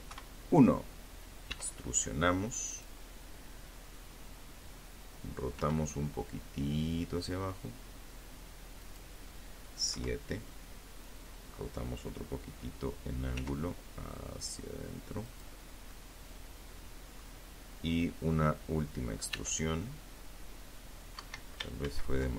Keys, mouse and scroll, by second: 0.8 click, 3.7 r, 7.0 click, 8.0 KP_7, 11.5 r, 13.4 click, 14.1-15.5 middle drag, 16.4-17.4 middle drag, 17.5 e, 19.3 Escape, 21.6 ctrl+z.